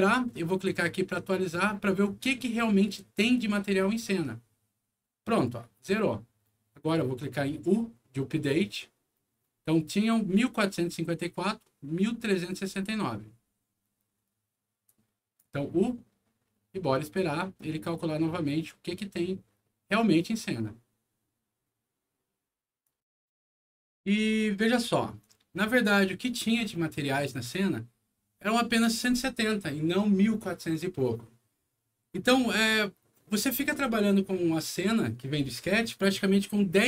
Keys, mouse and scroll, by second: 14.8 click, 22.7 click, 25.1 click.